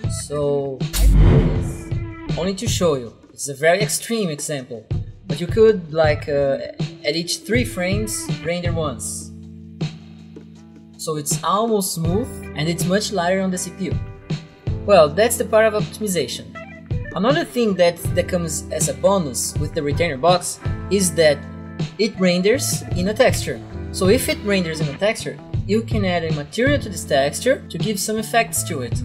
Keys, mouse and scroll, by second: 0.3 click, 1.9 click, 4.1 click, 7.0 3, 7.1 Return, 8.9 click, 14.2 click.